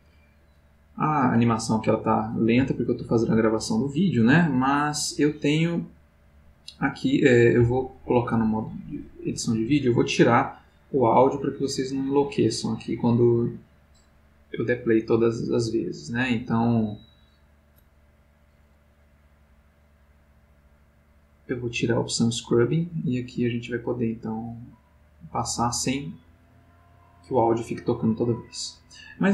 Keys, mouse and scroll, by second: 8.4 click, 10.6 middle click, 16.0 click, 21.4 click, 23.6-24.4 drag, 24.5-26.2 drag, 27.2 click.